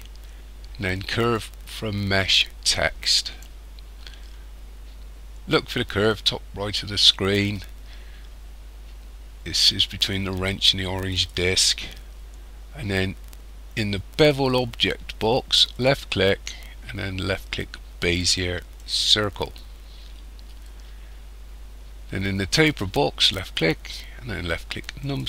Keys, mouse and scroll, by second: 1.3 alt+c, 11.1 click, 15.7 click, 23.2 click.